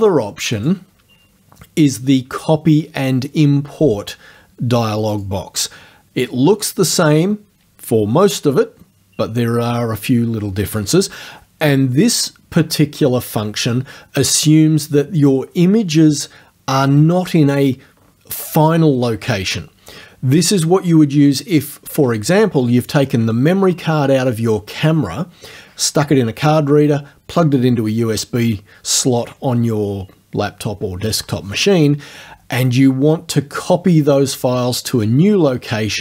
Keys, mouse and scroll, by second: 0.6 click, 5.2 click.